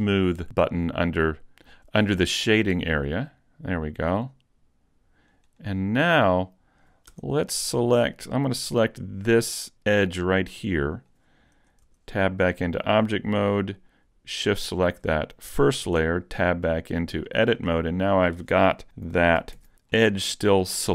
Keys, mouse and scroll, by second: 3.1 click, 5.1 click, 7.1 Tab, 8.6 right click, 10.2 middle click, 11.9 Tab, 14.6 shift+click, 15.9 Tab, 16.5 middle click, 17.3 shift+middle click, 17.8 middle click, 19.6 ctrl+alt+Left, 20.0 shift+middle click.